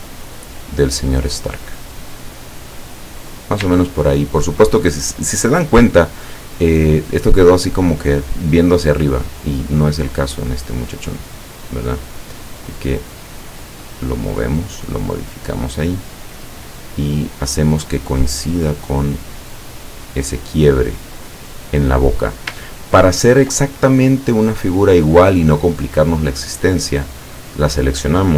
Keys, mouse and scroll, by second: 1.7 click, 4.2 ctrl+scroll up 2, 6.2 scroll down 2, 6.6 scroll up 2, 10.4 click, 11.6 click, 12.8-17.2 drag, 18.2-21.5 drag, 22.9 ctrl+scroll down 2, 27.1 click.